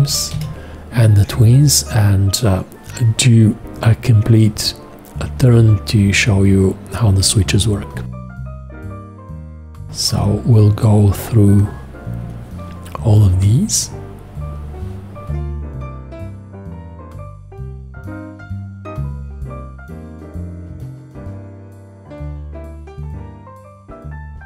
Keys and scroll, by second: 0.4 5.